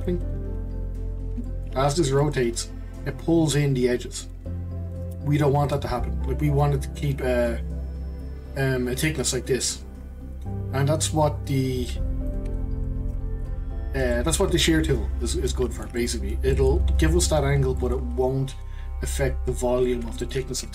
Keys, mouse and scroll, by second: 0.0 click, 1.4 shift+middle click, 1.9 scroll up 1, 2.2-5.2 shift+middle drag, 5.6 click, 12.7 ctrl+z, 13.0 ctrl+z, 14.1 middle click, 14.9-15.3 scroll down 2, 15.3-20.6 middle drag, 20.6 scroll up 1.